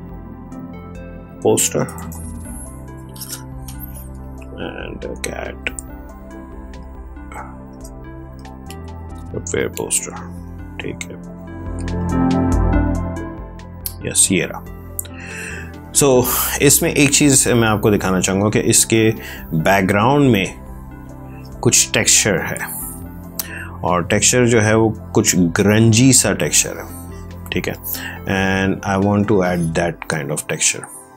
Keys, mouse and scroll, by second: 0.7-2.4 typing, 3.5 Return, 7.6 space.